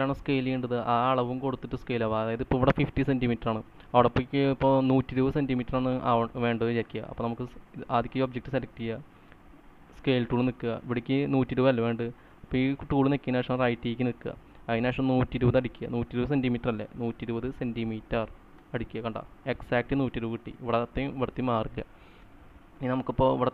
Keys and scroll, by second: 15.2-18.0 typing, 19.1 Return, 22.7 ctrl+z.